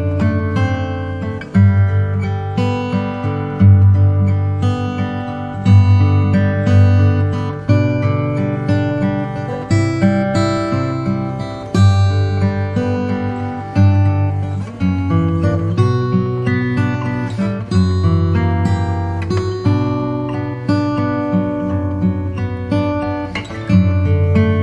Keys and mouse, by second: 5.1 ctrl+r, 7.5 ctrl+b, 15.7 ctrl+r, 18.3 ctrl+z, 20.2 ctrl+r, 24.0 ctrl+b.